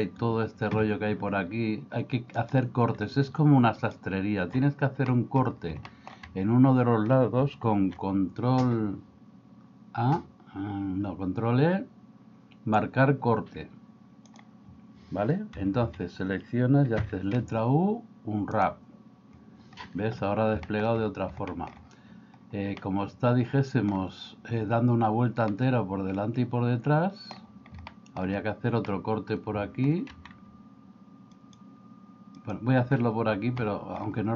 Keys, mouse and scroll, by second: 2.4 click, 5.1 middle click, 5.9 shift+middle click, 7.8 ctrl+e, 15.6 a, 15.9 a, 17.0 u, 20.7 shift+middle click, 21.6 middle click, 22.9-23.9 middle drag, 25.5-27.4 middle drag, 27.9 shift+middle click, 28.9-29.9 middle drag, 33.6 middle click.